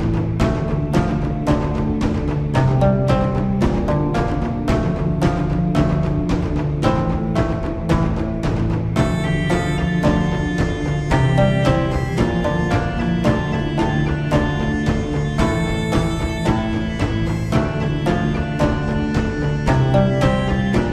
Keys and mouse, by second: 1.0 middle click, 2.3-4.3 drag, 5.5-7.3 shift+drag, 9.8-13.6 middle drag, 15.0-16.2 shift+drag, 17.5 middle click, 19.0-20.6 shift+drag.